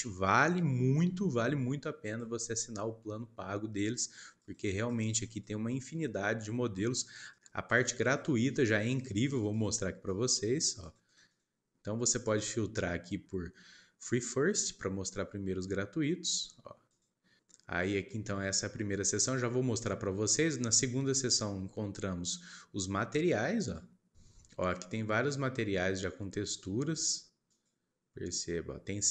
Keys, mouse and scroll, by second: 12.1-13.2 drag, 16.8 click, 23.5 click, 27.5-29.1 drag.